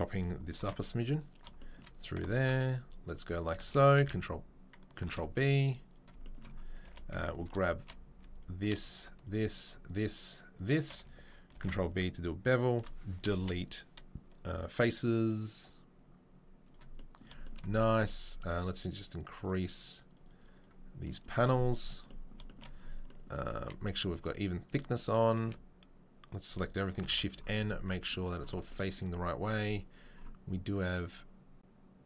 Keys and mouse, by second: 0.6 ctrl+b, 2.4 ctrl+r, 4.0 ctrl+v, 5.0 ctrl+b, 6.1-7.3 shift+middle drag, 6.8 2, 7.3 alt+click, 7.4 alt+middle click, 7.9 middle click, 8.3 click, 8.4 middle click, 10.9-32.0 ctrl+middle drag, 19.4-21.8 drag, 23.5 a, 24.6 click, 25.4 a, 27.0 shift+n, 27.6 Tab, 28.5 Tab.